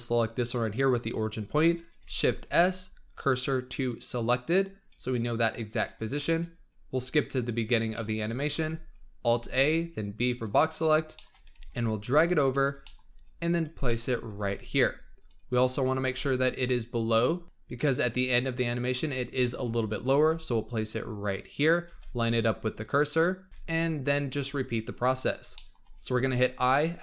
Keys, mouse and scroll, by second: 0.1 click, 1.9 shift+s, 4.7-5.5 scroll down 5, 5.5-6.0 scroll down 5, 6.0-7.2 shift+middle drag, 7.2-7.8 drag, 7.8-8.4 shift+middle drag, 8.4 alt+a, 9.3 b, 10.8 scroll up 2, 11.1-11.4 shift+middle drag, 11.4 g, 12.5 scroll up 3, 12.7 shift+middle click, 13.1-13.8 scroll up 8, 13.8 shift+middle drag, 14.0 shift+scroll up 2, 14.3 g, 15.3-15.9 scroll up 3, 15.9 g, 19.0-19.3 scroll up 3, 19.3-19.6 shift+middle drag, 19.6-20.0 scroll up 4, 20.0 g, 21.7 g, 23.5 g, 24.5-25.4 scroll down 15, 25.4-25.8 shift+middle drag, 25.8-26.5 scroll down 5.